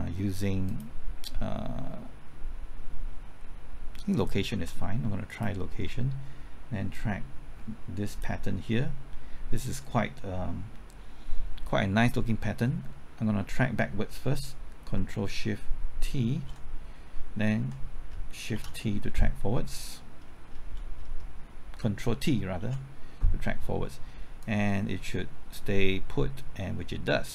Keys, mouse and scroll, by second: 0.6 click, 5.2 ctrl+click, 6.9-8.6 drag, 16.3 ctrl+shift+t, 18.5 shift+t, 22.5 ctrl+t, 24.4-27.3 drag.